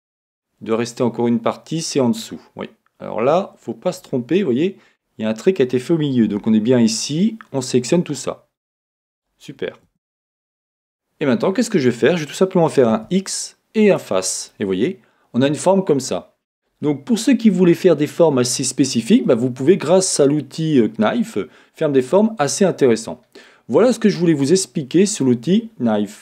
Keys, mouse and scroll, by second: 0.1 Escape, 1.4-2.6 middle drag, 9.9 Escape, 9.9-11.3 middle drag, 11.3-19.7 middle drag, 16.6-17.8 scroll up 2, 17.8-19.7 scroll up 1, 19.8-22.6 middle drag, 23.5-26.2 middle drag, 23.9 scroll up 1, 24.0-24.6 scroll down 2, 25.3 scroll up 2, 25.4-26.2 scroll down 2.